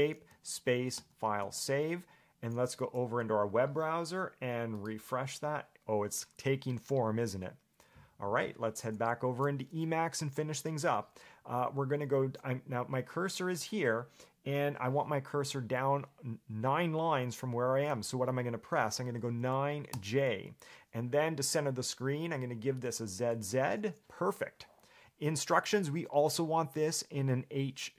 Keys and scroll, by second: 19.3 9, 20.1 j.